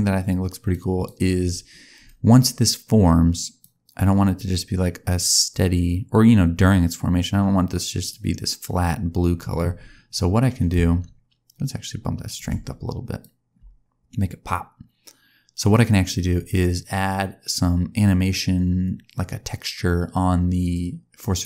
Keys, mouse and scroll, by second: 0.6 click, 1.9-2.7 scroll up 4, 3.6 click, 10.6 click, 13.2 click.